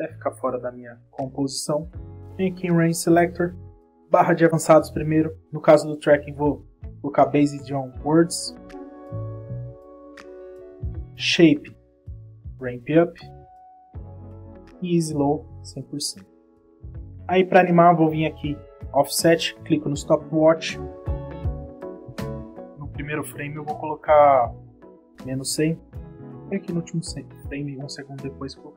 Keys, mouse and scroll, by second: 0.7 click, 2.2 click, 2.7-3.4 scroll down 1, 3.6 click, 17.5 click, 18.8 click, 20.2 click, 24.2 click, 25.9 click, 27.8 click.